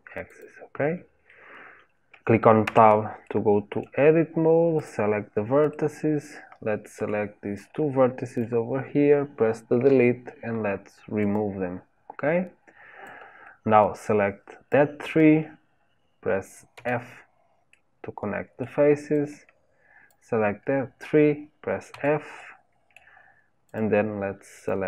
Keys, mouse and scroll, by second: 2.6 Tab, 3.2-4.8 middle drag, 4.8 click, 5.7-8.4 middle drag, 8.4 click, 11.3 Delete, 14.7 click, 16.7 f, 17.7-20.1 middle drag, 20.1 click, 21.9 f, 22.4-23.8 middle drag, 23.8 click.